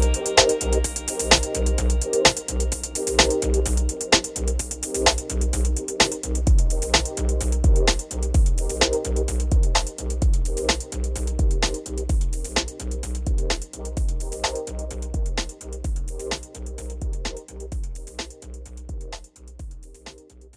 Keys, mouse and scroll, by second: 8.8 Tab, 10.1 click, 10.9 alt+scroll down 1, 12.0 click, 14.0 click, 14.3 alt+scroll up 1.